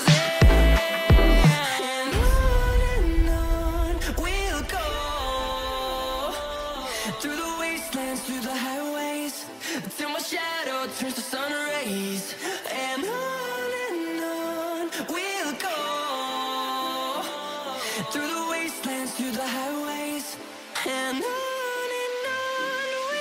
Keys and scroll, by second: 0.5 c, 2.6 Escape, 3.6 ctrl+r, 7.1 F2, 12.8 space, 13.7 F4, 15.4 F2, 16.4 shift+Page_Up, 16.9 Escape, 19.6 ctrl+r.